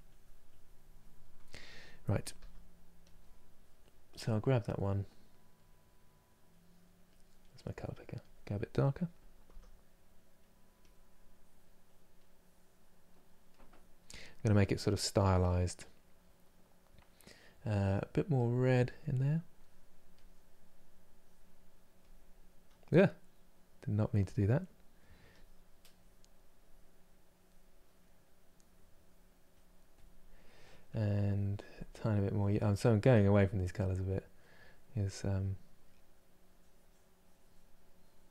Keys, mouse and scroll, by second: 2.0 f, 7.9 click, 9.1 f, 10.4-13.9 drag, 13.9-18.0 middle drag, 18.0 click, 19.8 click, 20.5-38.3 drag.